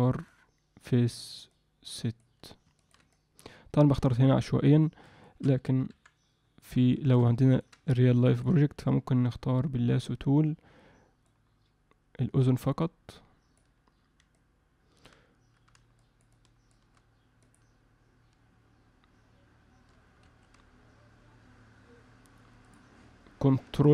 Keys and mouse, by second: 0.3 click, 1.5 click, 2.8 ctrl+alt+middle click, 3.1 alt+middle click, 4.8 alt+middle click, 5.2 alt+shift+middle click, 5.9 KP_1, 6.9 alt+shift+middle click, 7.4 ctrl+alt+middle click, 7.9 alt+middle click, 11.3-13.6 drag, 14.3 alt+middle click, 15.9 shift+click, 16.4 shift+click, 17.5-20.5 drag, 22.6-23.9 drag.